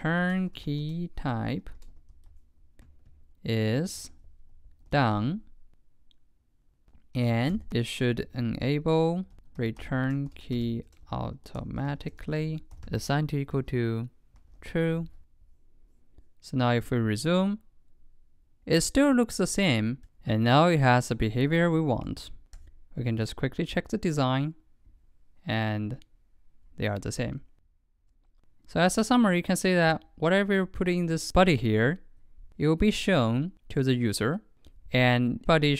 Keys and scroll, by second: 15.0 super+s.